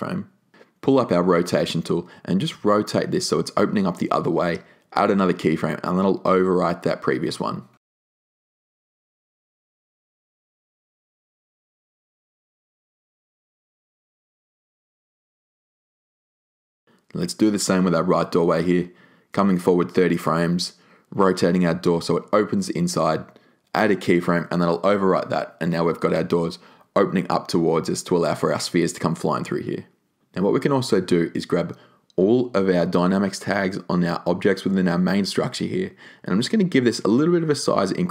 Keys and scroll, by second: 2.4 r.